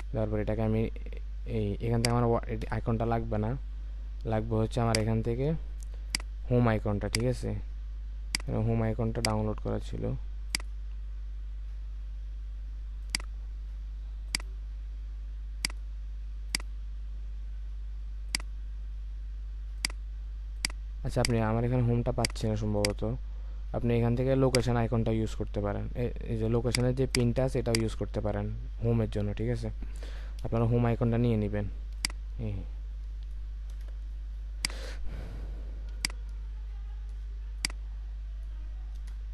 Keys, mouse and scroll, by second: 27.1 double click, 29.1 super+t, 29.8 Return, 33.7 alt+click, 39.0 Return.